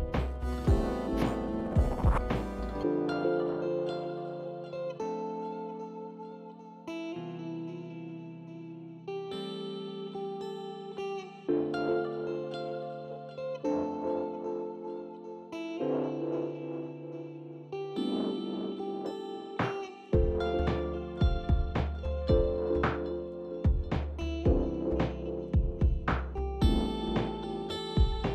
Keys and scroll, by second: 0.0-3.7 typing, 5.1 ctrl+a, 7.0-7.8 typing, 11.5 ctrl+alt+c, 12.1 ctrl+space, 12.5 ctrl+space, 25.1-25.8 w, 27.5 Up.